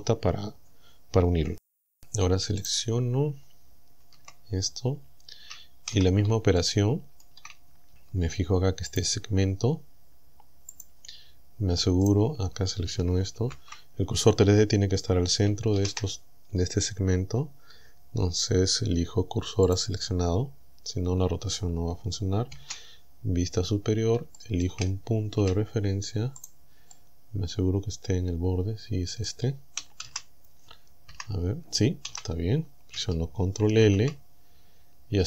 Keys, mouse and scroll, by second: 2.7 right click, 4.2 Tab, 4.8-5.2 scroll up 2, 5.9 z, 6.6 shift+middle click, 8.9 click, 10.8 click, 12.1 right click, 13.4 ctrl+l, 15.8 shift+s, 19.7 click, 22.5 KP_7, 23.8 scroll up 2, 24.4 shift+click, 25.4 a, 26.5 right click, 26.9-28.1 middle drag, 28.1-29.5 drag, 30.1 z, 31.1 KP_1, 32.1 z, 33.9 ctrl+l, 34.7 scroll down 2.